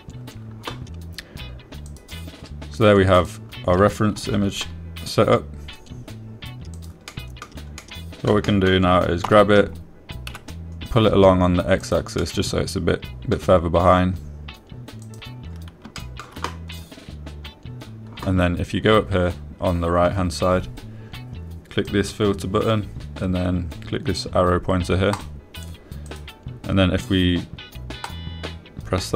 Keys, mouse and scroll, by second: 0.1 Return, 4.5 click, 5.5 g, 5.7 z, 8.1 click, 8.5-8.8 drag, 9.2-9.6 drag, 9.8 click, 10.6 g, 11.7 x, 13.2 click, 13.6-14.7 drag, 16.4 click, 17.3 shift+drag, 18.2 click, 23.2-27.2 drag.